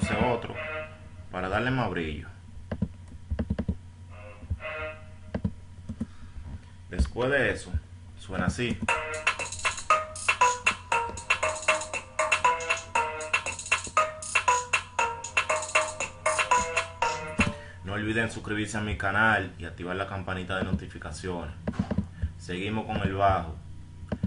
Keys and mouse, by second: 6.3 F1, 22.5 F1.